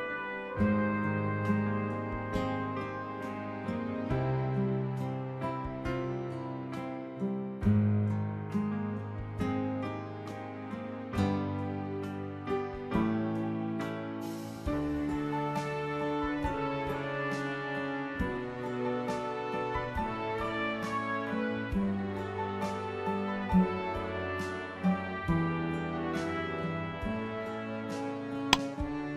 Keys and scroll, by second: 0.2 Delete, 19.4-20.5 typing.